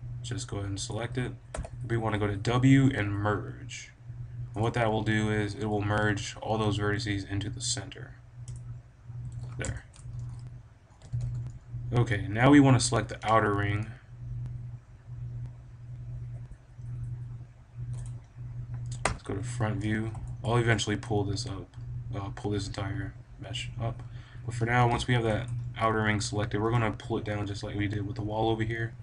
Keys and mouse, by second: 0.8 click, 1.4 w, 9.1 a, 9.6-11.4 drag, 10.9 b, 11.6 middle click, 18.0-19.5 right drag, 18.9 KP_1, 19.5-22.1 drag, 24.5-26.7 drag, 26.2 KP_1, 27.5-28.6 middle drag.